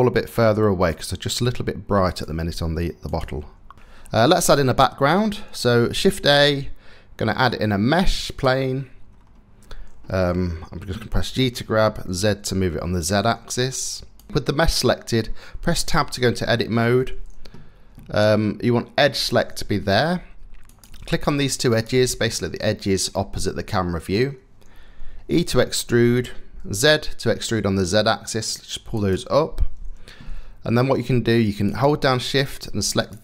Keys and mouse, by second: 0.5 click, 0.9 g, 2.7 click, 3.0 g, 5.7 shift+a, 10.8 g, 14.3 Tab, 15.5 Tab, 21.9-22.9 middle drag, 23.1 middle click, 23.3 middle click, 23.5 middle click, 25.0 e, 28.5-31.4 middle drag.